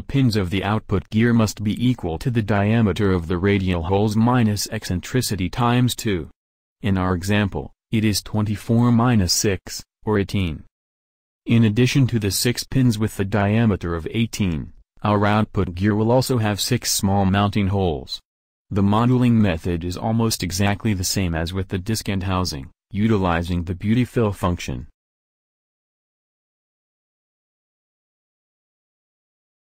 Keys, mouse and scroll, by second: 6.3 g, 10.7 Tab, 12.7 shift+d, 14.6 shift+d, 16.0 shift+d, 17.6 shift+d, 19.1 shift+d, 20.4 a, 20.6 a, 21.1 e, 23.2 f, 24.0 a, 29.4 shift+a.